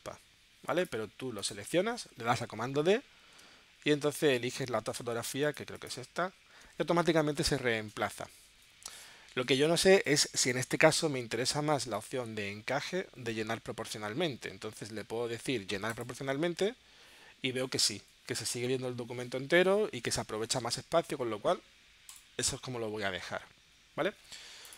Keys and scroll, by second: 3.2 super+d.